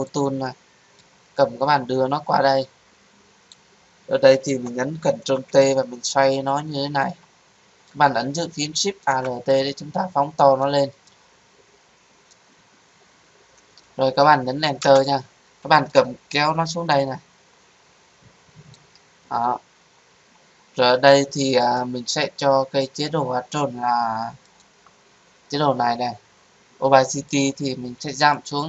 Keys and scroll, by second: 5.1 ctrl+t, 14.7 Return.